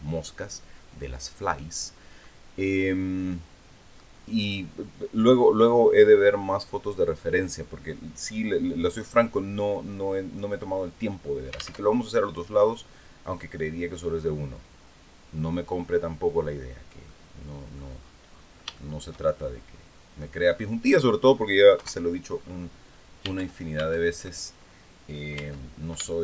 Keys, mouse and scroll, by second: 11.3 alt+Tab, 12.2-12.5 scroll down 2, 16.5 click, 18.3 shift+click, 19.1 middle click, 21.2 KP_1, 21.9-22.3 scroll up 2, 22.8 Tab, 24.8 Tab, 25.6-26.2 shift+middle drag.